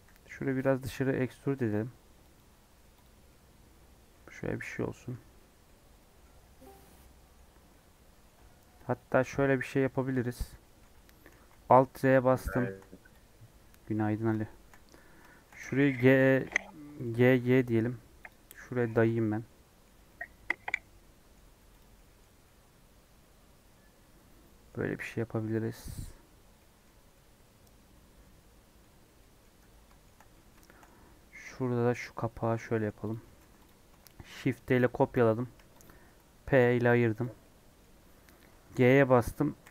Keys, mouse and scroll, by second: 2.6 Tab, 3.1 scroll down 4, 3.2-5.1 middle drag, 5.1 scroll up 3, 5.4 middle click, 5.7 Tab, 6.0 middle click, 6.2-6.5 scroll up 2, 6.7-9.2 middle drag, 9.2 KP_1, 9.7 KP_3, 10.1 scroll down 4, 10.6 shift+middle click, 11.3 alt+z, 11.9 1, 12.2 scroll up 2, 12.5-14.2 shift+middle drag, 14.2 click, 14.4-15.6 shift+middle drag, 15.6 g, 17.2 g, 18.5 scroll down 1, 18.6 middle click, 18.9 alt+z, 19.2 middle click, 19.8 scroll up 2, 20.1-21.4 middle drag, 21.4 Tab, 22.0 middle click, 22.2 Tab, 22.4-24.7 middle drag, 24.7 Tab, 24.9 scroll down 2, 25.0-26.3 middle drag, 26.3 scroll up 3, 26.6 middle click, 26.9 Tab, 27.0 scroll down 1, 27.1-29.0 middle drag, 29.0 scroll down 1, 29.1 middle click, 29.4 Tab, 29.6 scroll down 4, 29.8-31.8 middle drag, 31.8 scroll up 2, 32.5 scroll up 3, 32.7 middle click, 33.1 click, 33.2 Tab, 33.3 3, 33.6 click, 34.0 shift+d, 35.8 p, 36.3 Tab, 36.6 click, 37.2 click, 37.4-39.7 middle drag.